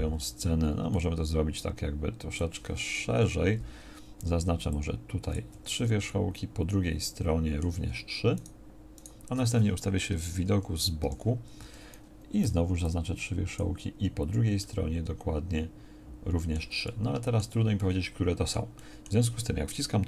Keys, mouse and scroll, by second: 3.1 KP_1, 4.2 c, 11.0 KP_3, 12.4 b.